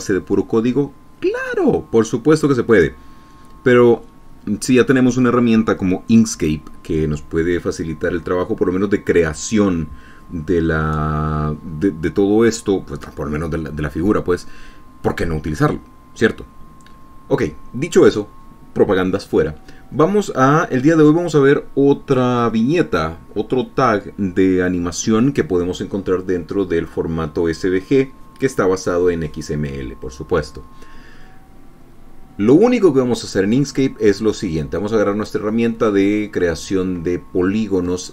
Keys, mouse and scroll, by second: 21.1 click, 32.7 click.